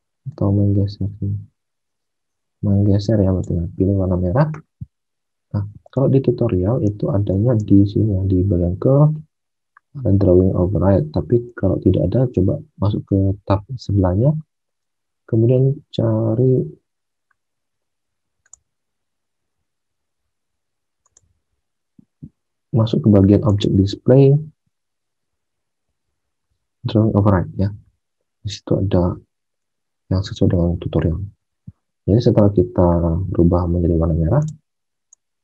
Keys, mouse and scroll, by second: 6.0 alt+Tab, 7.3 alt+Tab.